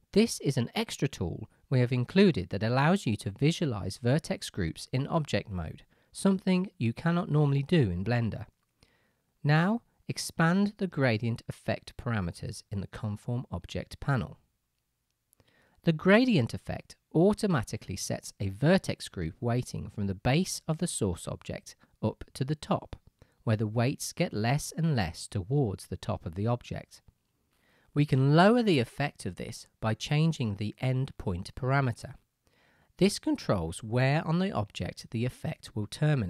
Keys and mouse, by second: 5.9 middle click, 6.2-7.7 middle drag, 8.4 shift+middle drag, 8.6-10.8 shift+middle drag, 11.6-36.2 middle drag.